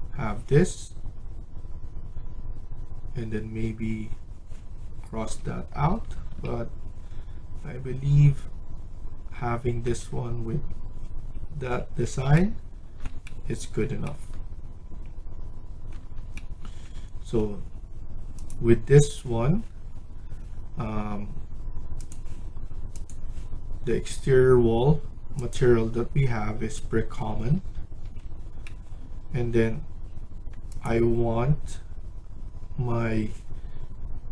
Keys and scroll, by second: 5.1 Escape, 5.4 Escape, 20.9 Escape, 26.9 Escape, 27.2 Escape, 27.4 Escape, 28.0 Escape.